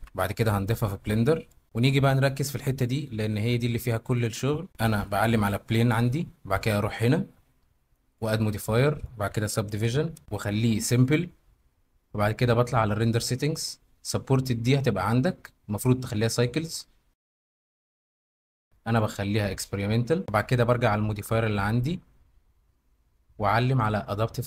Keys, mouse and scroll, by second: 3.6 middle click, 4.7 Tab, 6.9 middle click, 8.1-10.2 middle drag, 10.9 middle click, 13.1 middle click, 18.7-19.7 middle drag.